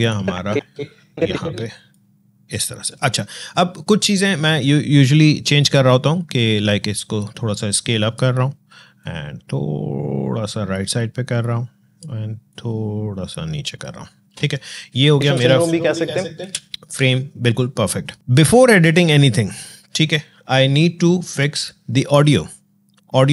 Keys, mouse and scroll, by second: 6.7-15.2 drag, 15.2 space.